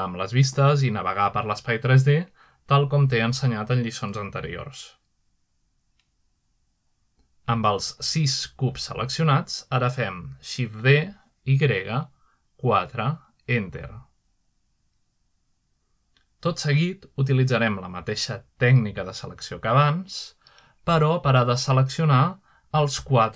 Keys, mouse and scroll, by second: 4.4 middle drag, 6.7-7.8 middle drag, 7.0-7.9 scroll up 2, 8.2 middle click, 8.6-9.0 scroll down 2, 9.4-10.3 scroll up 2, 10.3-11.0 middle drag, 10.3-11.0 scroll down 2, 11.5 shift+d, 12.2 y, 13.1 4, 14.4 Return, 18.7-21.6 middle drag, 21.1 typing.